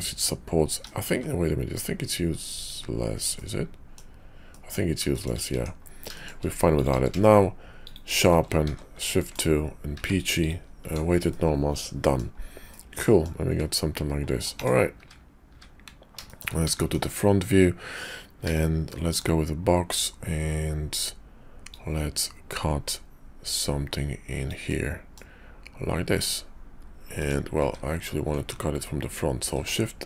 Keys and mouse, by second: 1.0 x, 3.3 middle click, 4.5 middle click, 5.5 Tab, 6.6 click, 6.9 q, 8.7 shift+2, 9.2 middle click, 9.9 q, 11.3 click, 12.7 click, 13.0 middle click, 13.5 `, 14.9 `, 15.5 `, 16.2 shift+middle click, 18.4 d, 21.6-27.4 drag, 27.6 `, 29.6 shift+v.